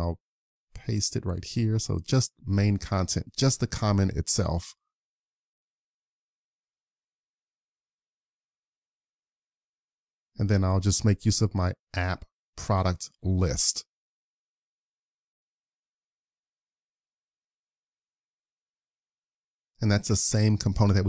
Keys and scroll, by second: 3.8 BackSpace, 3.8 Delete, 4.0 BackSpace, 11.6 super+s, 19.5 super+s.